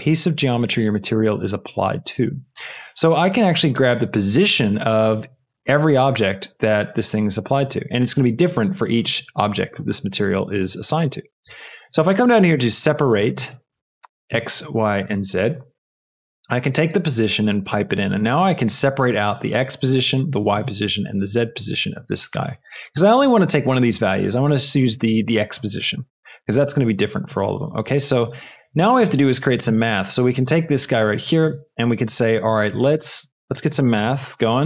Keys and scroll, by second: 11.5 shift+a, 12.4 s, 12.6 e, 13.5 Down, 15.0 Return, 32.8 shift+a, 33.9 a, 34.0 t.